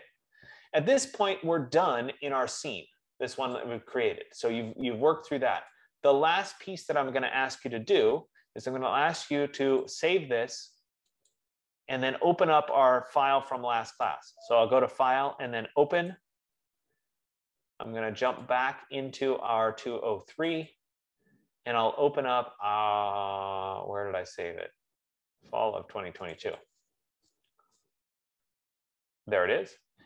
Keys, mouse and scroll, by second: 4.2 click, 6.5 click, 10.1 click, 11.6 click, 14.5 click, 16.5 click, 19.2 click, 20.8 click, 21.1 click, 22.1 F15, 26.6 click, 27.0 click.